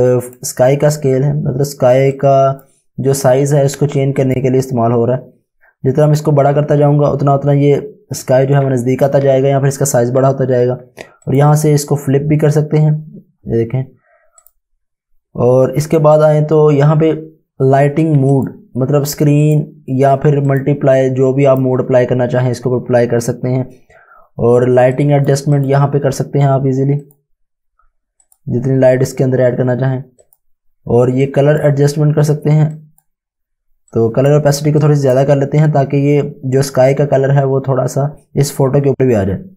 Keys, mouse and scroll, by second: 11.2 click, 14.4 click, 18.3 click, 23.6 scroll down 1, 25.0 click.